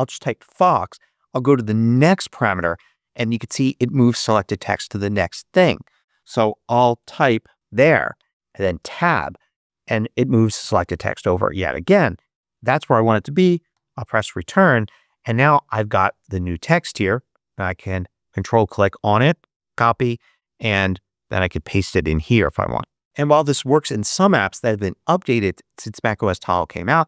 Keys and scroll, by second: 0.0-0.8 typing, 1.9 Tab, 6.1-8.0 typing, 8.7 Tab, 13.6 Return.